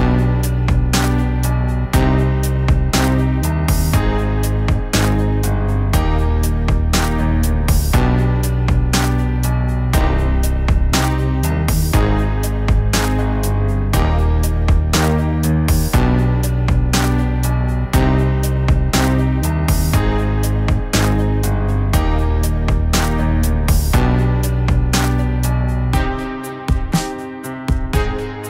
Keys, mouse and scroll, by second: 0.5 middle click, 7.1 middle click, 7.6 middle click, 8.4 middle click, 8.6 middle click, 9.8 middle click, 10.1 middle click, 10.3 middle click, 13.4 middle click, 14.1 middle click, 14.4 middle click, 14.8 middle click, 18.7 middle click, 22.2 middle click, 22.5 middle click, 24.2 middle click.